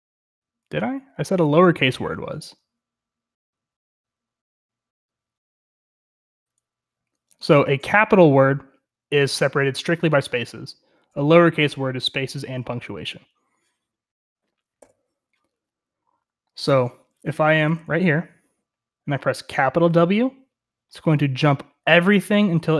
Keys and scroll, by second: 0.0-22.7 typing.